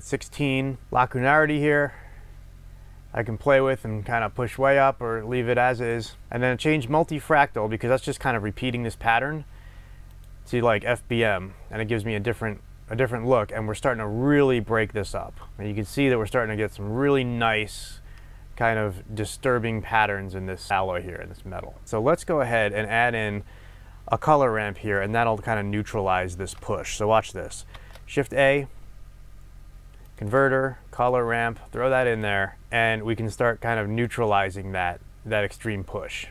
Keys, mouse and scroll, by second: 0.8 scroll up 1, 1.1-6.3 drag, 6.3-10.1 middle drag, 10.1-15.4 drag, 15.4 middle click, 15.5-21.8 drag, 21.8 middle click, 22.2 click, 24.5-32.2 middle drag, 27.7 shift+a, 32.6-36.3 drag.